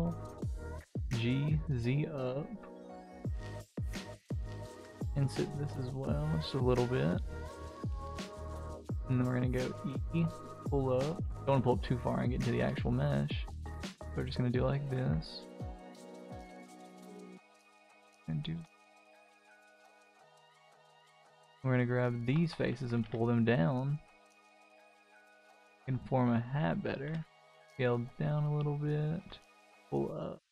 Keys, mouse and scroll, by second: 0.6 g, 3.4 ctrl+z, 3.7 ctrl+z, 5.6 i, 8.9 e, 10.0-11.3 middle drag, 11.8 middle click, 12.6 s, 13.8 Tab, 14.0-14.7 middle drag, 14.9 Tab, 15.9 s, 17.4 g, 18.6 g, 19.3 Tab, 19.6-20.2 middle drag, 20.5 Tab, 21.9 alt+click, 22.8 g, 25.6 Tab, 25.8 middle click, 26.5 middle click, 27.0 s, 28.1 middle click, 28.3-28.8 scroll down 2, 28.8-29.1 middle drag, 29.3 g.